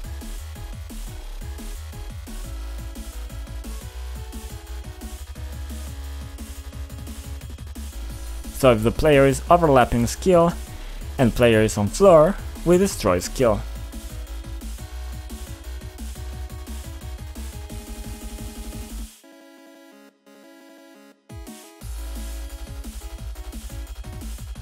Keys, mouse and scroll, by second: 0.9 click, 2.0 click, 6.9 click, 9.8 click, 11.9 double click, 12.7 click, 12.8 click, 13.4 double click, 13.4 double click, 14.6 click, 14.6 click, 15.4 click, 15.5 click, 16.4 c, 20.1 click, 20.3 double click.